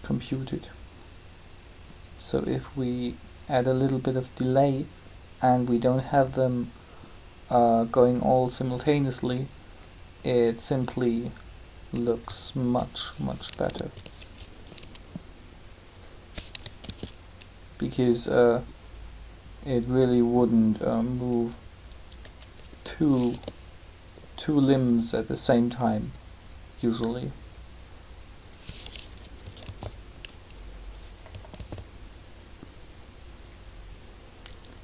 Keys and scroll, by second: 14.3 shift+g, 16.8 shift+d, 23.3 g, 29.6 alt+a.